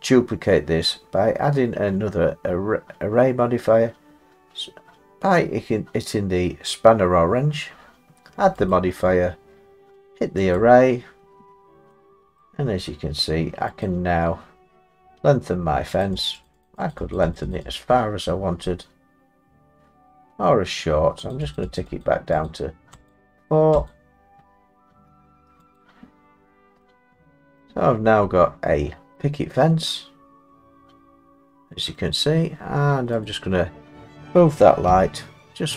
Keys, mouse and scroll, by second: 8.7 click, 10.5 click, 11.3-11.7 scroll, 12.4 middle click, 13.8 click, 14.6 middle click, 14.6 middle click, 16.0 click, 16.2 click, 16.4 click, 16.6 click, 16.9 click, 17.3 click, 17.5 click, 17.7 click, 18.2-19.4 scroll, 19.4 scroll, 21.3 click, 21.5 click, 21.8 click, 22.0 click, 23.1 click, 23.9 click, 25.8 click, 26.4 middle click, 26.5 middle click, 26.8-27.6 scroll, 27.6-28.2 scroll, 29.1-29.6 scroll, 31.9 middle click, 33.2 click, 34.9 g.